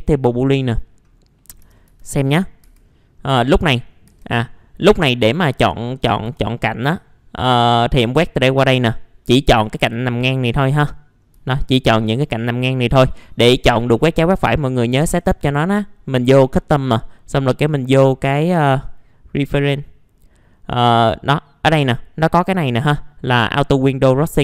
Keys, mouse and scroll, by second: 0.5 click, 1.4 middle click, 1.6 f, 1.9 z, 2.3-3.4 scroll up 2, 2.6 F4, 3.4 middle click, 3.8 scroll up 1, 4.1 F4, 4.4 scroll up 1, 5.1 scroll down 1, 6.2 2, 7.5-8.9 drag, 8.9 scroll up 1, 10.7-11.2 scroll down 1, 11.5 alt+middle click, 12.9 middle click, 15.0 click.